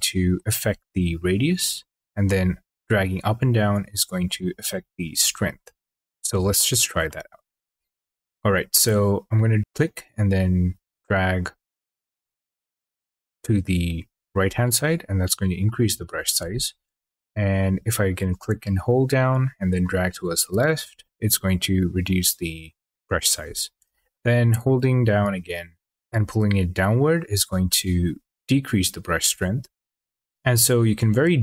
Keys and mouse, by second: 6.9 middle click, 8.3 shift+click, 16.9 shift+click, 24.5 shift+click, 29.2 shift+click.